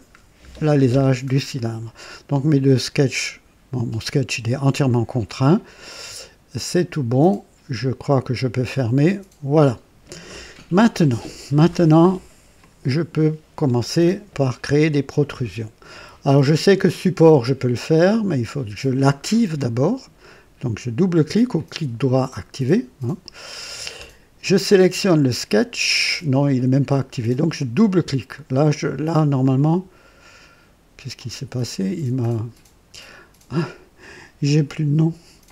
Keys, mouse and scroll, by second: 0.4 scroll up 2, 1.0 scroll down 2, 6.8 click, 12.5-14.1 drag, 21.4 right click, 22.2 click, 24.6 click, 27.6 click, 29.3 click, 31.1 click, 32.3-32.7 scroll down 4, 33.9 click, 35.3 click.